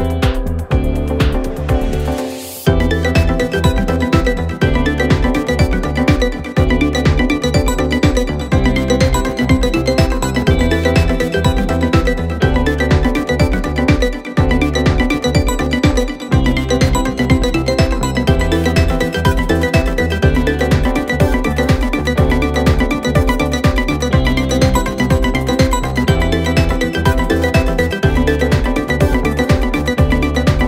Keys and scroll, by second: 4.3 ctrl+z, 6.4 ctrl+z.